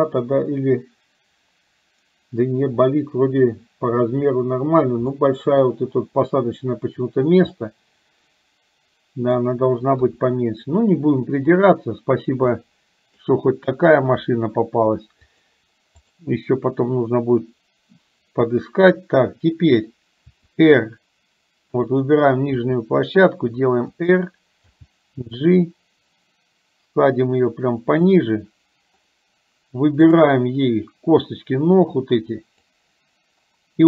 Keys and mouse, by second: 5.2 middle click, 7.7-9.4 middle drag, 10.1 KP_3, 12.6 middle click, 14.3 KP_3, 15.2-16.6 drag, 21.7 click, 24.9 g, 30.2 click, 31.3-33.1 drag.